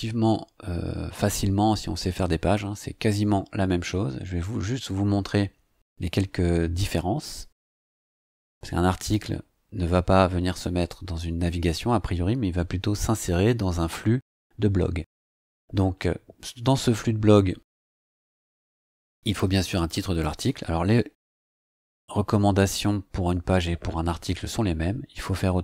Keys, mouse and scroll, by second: 8.0 click, 18.4-22.5 typing.